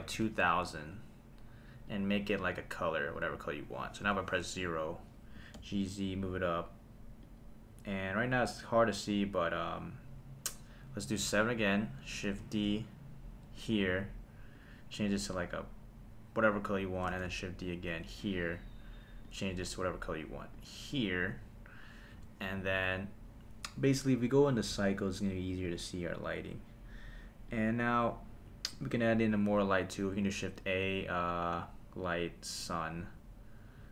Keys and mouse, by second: 0.9 click, 4.0 KP_0, 5.4 g, 5.6 z, 7.2 click, 11.2 KP_7, 12.3 shift+d, 13.6 click, 14.5 click, 17.1 shift+d, 18.2 click, 19.2 click, 19.8 click, 22.1 KP_0, 24.5 click, 25.1-25.8 drag, 27.5 click, 28.7 click, 29.4 click, 30.2 shift+a, 33.0 g.